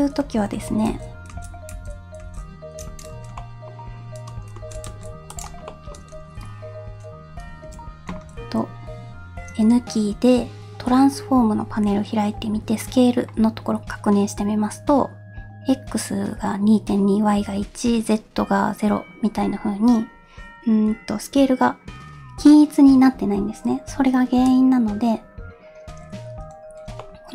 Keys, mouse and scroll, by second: 0.2 ctrl+z, 0.5 ctrl+z, 1.3 ctrl+z, 1.7 ctrl+z, 2.2 ctrl+z, 3.1 Tab, 3.4 middle drag, 3.9 scroll up 1, 4.6 shift+d, 5.7 shift+middle drag, 7.6 n, 27.0-27.3 middle drag.